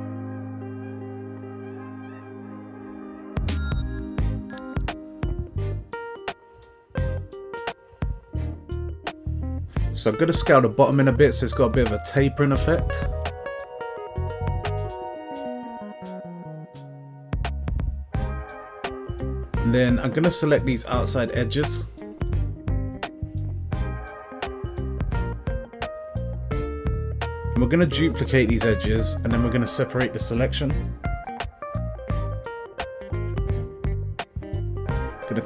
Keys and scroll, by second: 8.9 s, 9.5 x, 16.4 Tab, 21.3 Tab, 22.2 alt+s, 26.4 alt+s, 35.2 Tab.